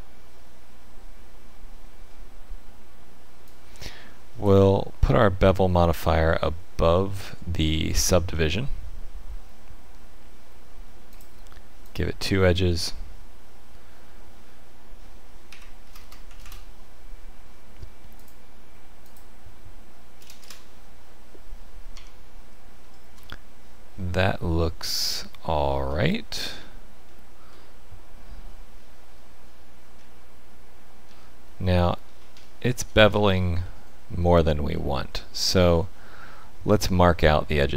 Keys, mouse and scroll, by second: 3.4 click, 6.4 middle click, 11.1 click, 11.8 click, 16.0 KP_0, 18.1 click, 21.9 Tab, 22.8 shift+middle click, 23.2 middle click, 24.3-24.8 scroll down 2, 25.1 shift+middle click, 26.3-26.8 scroll up 4, 27.0 shift+middle click, 29.9 Tab, 31.0 Tab, 31.6-32.4 scroll down 8, 32.4 shift+middle click, 33.0-33.4 scroll up 5, 33.6 shift+middle click, 34.7 middle click.